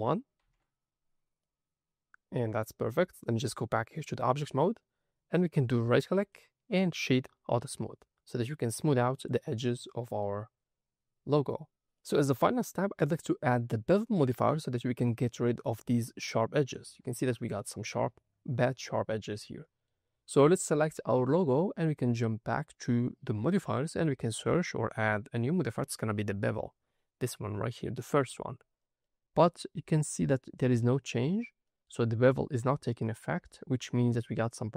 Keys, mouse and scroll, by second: 1.3 middle click, 1.3-1.9 scroll down 1, 3.2-4.0 drag, 4.3 middle click, 4.9 scroll up 2, 5.3 middle click, 5.7 click, 6.1 click, 6.2-7.1 right drag, 7.6 scroll down 1, 8.4 middle click, 9.1 click, 9.4-9.8 scroll down 3, 9.8-10.4 middle drag, 10.4-11.3 scroll up 1, 11.7 middle click, 11.9 middle click, 13.3-14.2 scroll up 3, 14.2 middle click, 15.6 middle click, 16.2 ctrl+middle click, 18.8-19.6 scroll down 4, 19.6 middle click, 20.1-20.6 scroll up 2, 20.6 click, 24.3-28.3 drag, 29.0 middle click, 31.6-32.9 middle drag, 33.9-34.7 middle drag.